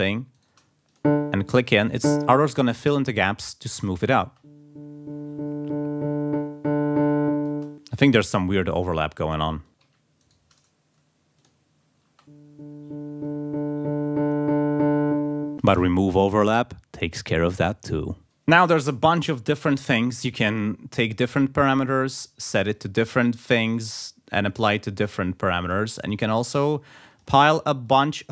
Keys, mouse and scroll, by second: 0.3 shift+right click, 0.9 shift+click, 1.9 click, 3.8 click, 4.2 space, 7.2 space, 9.6 click, 9.8 ctrl+a, 10.4 ctrl+click, 11.4 click, 12.1 space, 18.2 right click, 19.5 click, 20.5 click, 21.0 click, 22.0 click, 22.5 click, 23.7 click, 25.6 click, 26.1 click, 26.6 click, 27.1 click, 27.5 click, 27.8 click.